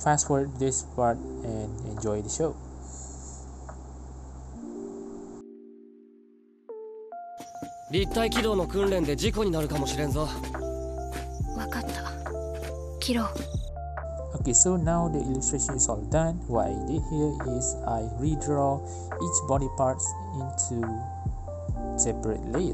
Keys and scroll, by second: 6.2 ctrl+z, 6.8 ctrl+z, 15.9-16.5 typing, 16.5 Return, 17.2 ctrl+z, 19.8 ctrl+j, 19.9-21.2 typing, 20.2 Return, 21.1 Right, 21.2 Return.